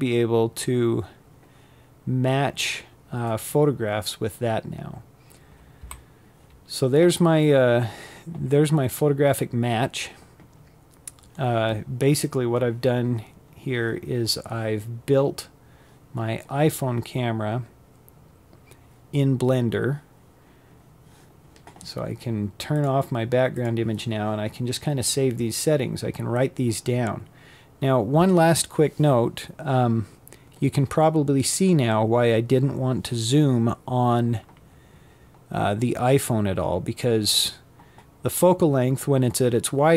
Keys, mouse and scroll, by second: 0.6-3.5 scroll up 1, 3.5 z, 9.9 click, 10.7 scroll down 3, 20.4 click.